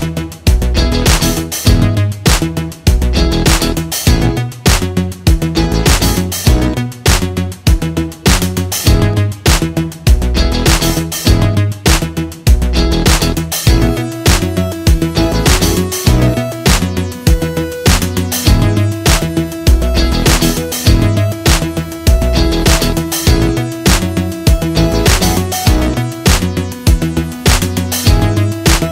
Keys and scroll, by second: 0.6 v, 1.1 Delete, 2.5 Delete, 3.7 Down, 4.0 Right, 4.2 Down, 4.5 Down, 5.7 z, 5.9 space, 6.7 l, 9.8 i, 11.0 v, 11.5 Right, 12.1 Down, 12.2 Right, 12.4 Down, 12.7 Right, 13.1 Left, 13.3 Right, 15.9 Up, 17.3 Up, 21.7 ctrl+z, 23.4 a, 25.1 z, 25.3 space, 25.4 v.